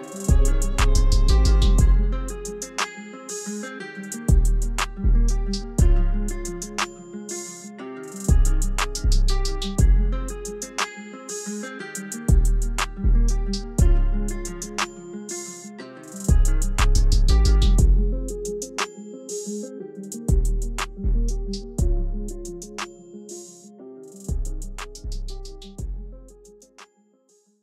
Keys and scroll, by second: 0.4 shift+t, 5.3-6.5 typing, 23.8-25.0 typing.